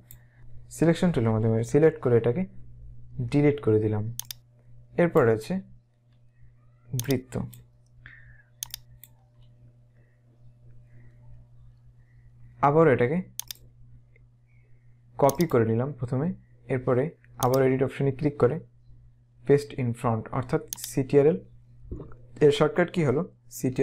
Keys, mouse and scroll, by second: 3.4 Delete, 4.2 click, 7.1 click, 8.8 click, 13.6 click, 15.4 click, 17.6 click, 20.9 click.